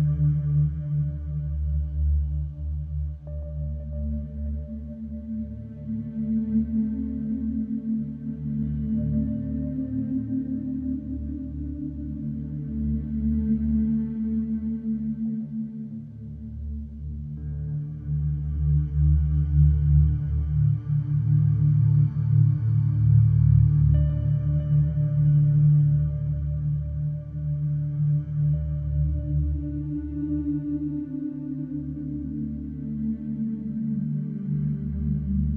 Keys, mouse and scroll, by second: 0.7 click, 2.9 KP_2, 3.1 KP_5, 5.4 click, 6.6 click, 7.8 click, 9.6 click, 12.7 click, 13.9 click, 16.4 click, 22.0 click, 23.8 click, 25.8 click, 27.7 click, 29.1 click, 31.1 click, 33.8 click.